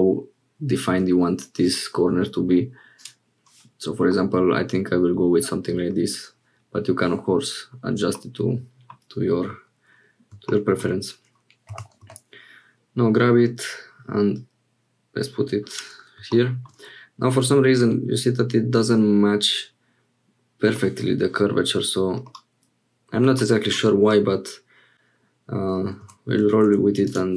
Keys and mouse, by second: 3.0 click, 4.1-5.9 middle drag, 8.2 middle click, 11.7 g, 16.6 middle click, 17.3-20.8 drag, 22.3-23.5 drag, 24.1-25.8 drag, 26.0 Tab, 26.6 1, 27.0 click.